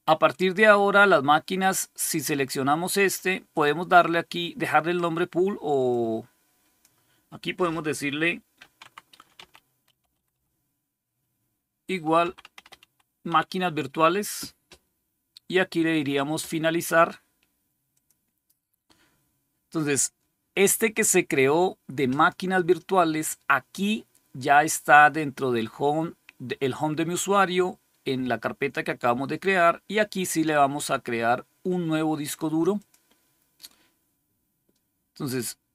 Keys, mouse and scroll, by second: 3.4 click, 5.8 click, 7.2 click, 8.2-10.7 typing, 11.8-13.6 typing, 17.8 click, 22.0 click, 32.7 click.